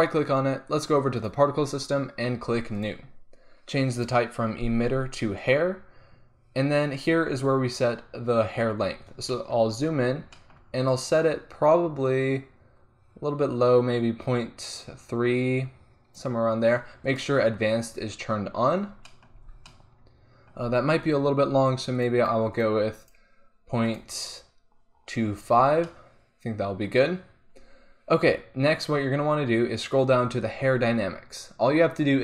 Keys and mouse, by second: 2.8-6.4 drag, 8.8-9.4 drag, 9.4-9.9 drag, 12.0-19.1 drag, 19.4 z, 22.0-23.4 drag, 25.1-25.6 drag, 25.6-26.0 middle drag.